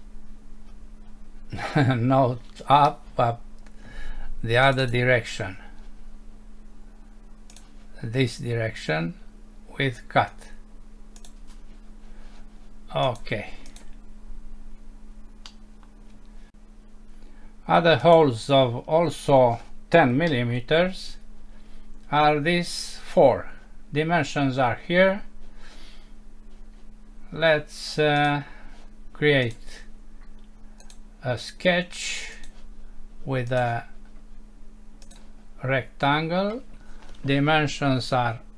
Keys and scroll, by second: 15.5 F6, 20.3 Home.